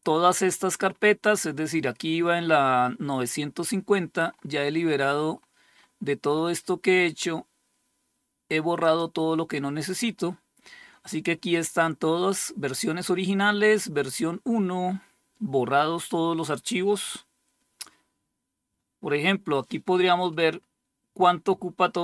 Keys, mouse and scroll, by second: 3.7-4.3 scroll up 2, 4.7-6.0 scroll up 2, 8.3 click.